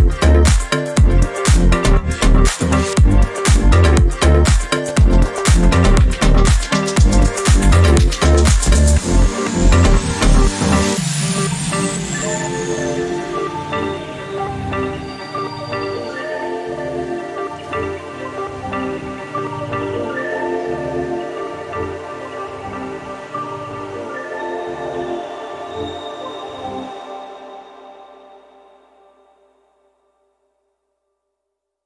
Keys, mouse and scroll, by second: 0.8 shift+click, 1.3 click, 2.2 shift+click, 3.3 shift+click, 4.3 click, 4.9 click, 5.8 click, 6.9 ctrl+s, 14.7 click, 16.1 click, 16.8-17.4 ctrl+scroll up 6, 18.2-19.3 ctrl+shift+drag, 20.2 shift+click, 21.7-23.6 ctrl+shift+drag, 24.2 ctrl+shift+click, 24.9-25.5 ctrl+scroll up 4, 26.4 ctrl+shift+middle click, 27.6-30.0 ctrl+shift+drag, 30.6 ctrl+d, 31.0-31.8 ctrl+drag.